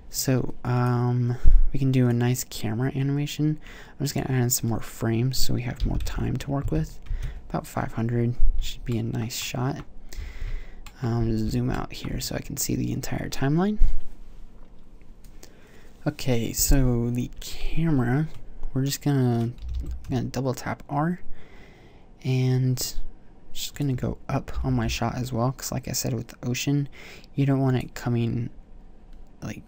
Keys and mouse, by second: 19.8 r, 24.0 click, 24.7 g, 28.0-29.6 drag.